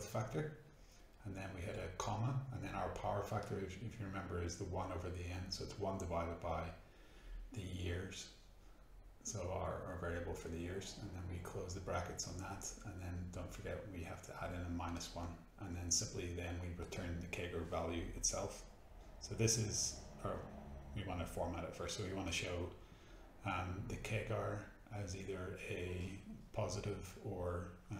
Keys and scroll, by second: 0.0 space, 2.5 1, 2.7 space, 3.2 /, 3.3 space, 4.4-6.6 typing, 7.0 Tab, 9.3 shift+0, 11.0 -, 11.4 1, 12.4 shift+Return, 12.8-14.4 typing, 14.6 shift+Return, 15.9-17.7 typing, 17.8 Tab, 20.0 shift+-, 20.5 Tab, 23.7-25.9 typing, 27.4 shift+5.